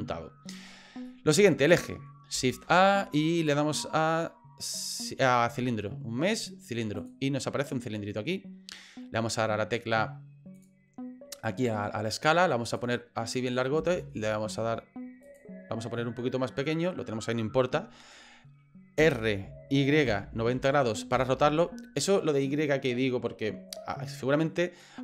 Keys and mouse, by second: 1.1 middle click, 2.6 shift+a, 10.6 click, 12.8 click, 13.8 s, 19.0 r, 24.9 middle click.